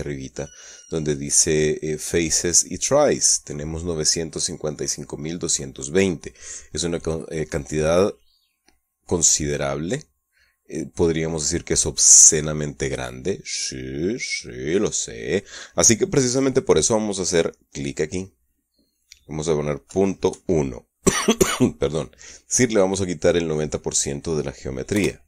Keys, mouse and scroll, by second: 10.4-13.9 middle drag, 14.1 middle click, 18.2 click, 20.3 KP_Decimal, 20.7 KP_1.